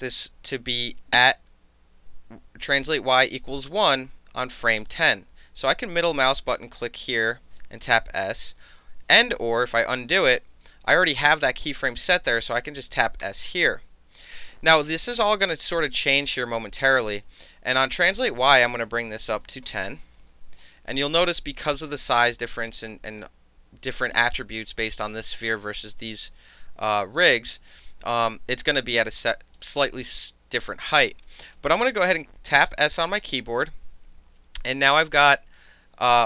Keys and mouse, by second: 6.5-7.6 middle drag, 8.0 s, 9.4 ctrl+z, 10.6 click, 12.3 click, 13.2 s, 16.1-16.9 drag, 18.1 right click, 19.1 KP_2, 19.2 KP_0, 19.6 KP_Enter, 21.2-21.9 alt+drag, 22.1 alt+click, 23.2-24.2 alt+drag, 27.0 alt+right click, 27.3 alt+click, 29.2 alt+click, 31.3 alt+click, 32.7 s.